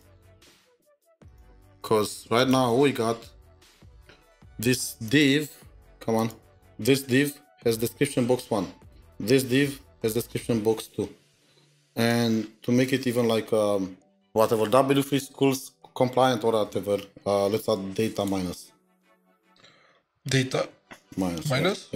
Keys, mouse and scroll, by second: 20.0 scroll down 1, 20.0 typing.